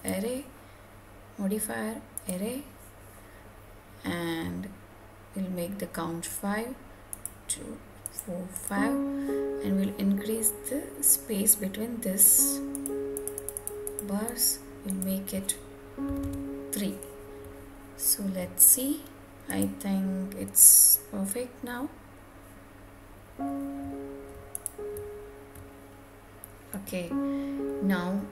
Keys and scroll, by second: 15.9 Return.